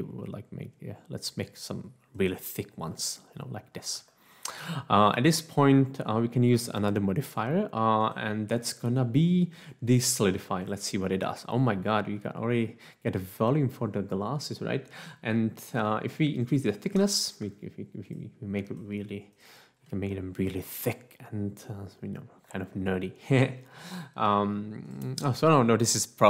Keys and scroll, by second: 16.9 F1, 17.3 Escape.